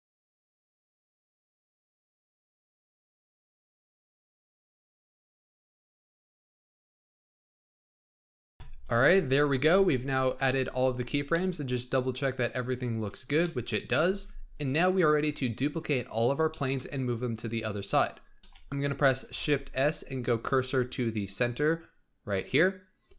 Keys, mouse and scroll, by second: 0.0-8.3 typing, 1.6 middle click, 2.1 ctrl+z, 3.3 scroll down 7, 3.3 middle click, 3.5 scroll up 4, 3.6 middle click, 3.7 middle click, 5.0 middle click, 6.3 middle click, 7.5 middle click, 9.8-11.2 scroll down 20, 11.2-14.0 middle drag, 14.0 alt+a, 15.1-16.0 scroll down 5, 16.0-16.4 scroll down 3, 16.4-18.0 shift+middle drag, 18.0-18.4 drag, 18.4-19.3 shift+middle drag, 19.3 shift+s.